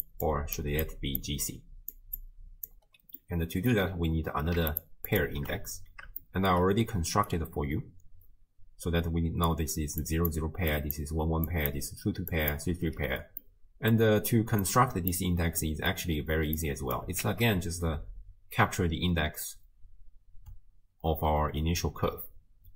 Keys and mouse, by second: 0.0-3.2 typing, 0.0 click, 0.8 click, 1.8 click, 2.2 click, 3.2 click, 4.7 ctrl+shift+click, 5.1 ctrl+shift+click, 6.2-6.6 shift+drag, 7.1-12.9 d, 7.3-9.5 drag, 10.3 drag, 10.7 click, 11.5 click, 13.5 click, 14.6 click, 15.6 click, 16.6 click, 17.2 shift+d.